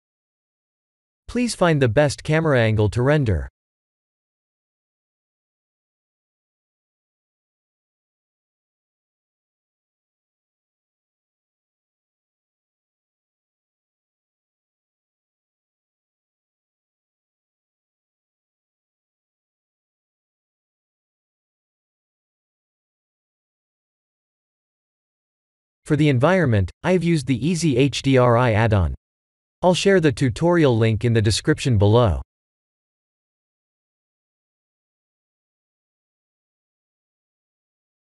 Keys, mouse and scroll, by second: 1.6 middle click, 6.8 middle click, 10.4 click, 10.8 click, 11.2 click, 11.6 click, 12.0 click, 12.5 click, 14.4 click, 15.6 click, 16.2 scroll down 5, 16.9 KP_0, 18.4 middle click, 20.4 click, 21.0 click, 21.7 click, 22.1 click, 23.0 click, 23.6 middle click, 25.0 middle click, 25.9 middle click, 27.9 n, 29.6 n, 30.1 n, 31.7 click, 36.2 n.